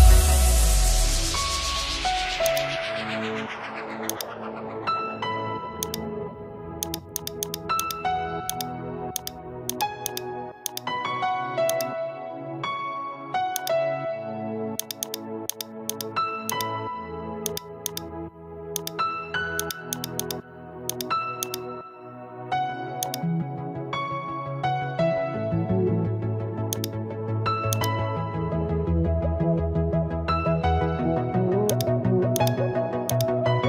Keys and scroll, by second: 1.1 ctrl+z, 25.2 ctrl+alt+shift+e.